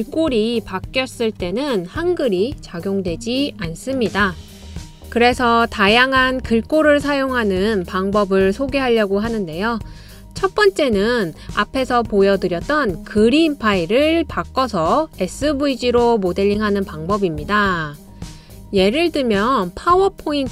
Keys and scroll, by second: 20.3-20.5 typing.